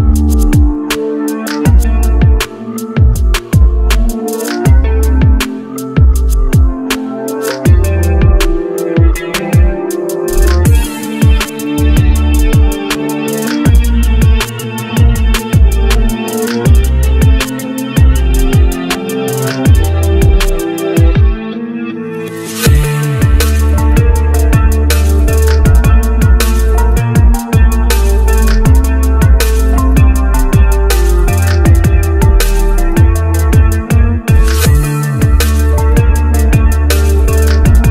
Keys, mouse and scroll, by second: 0.9 ctrl+click, 3.3 right click, 4.4-5.0 scroll up 1, 5.8-6.4 scroll up 1, 7.6 ctrl+right click, 8.1 ctrl+scroll down 1, 9.2-9.6 scroll down 1, 9.9-10.3 scroll up 1, 17.2 ctrl+right click, 17.9-18.3 ctrl+scroll down 1, 19.3 ctrl+r, 19.5 ctrl+r, 19.7 ctrl+r, 21.0 ctrl+r, 22.0 ctrl+r, 22.5 ctrl+r, 23.3 double click, 27.3 double click.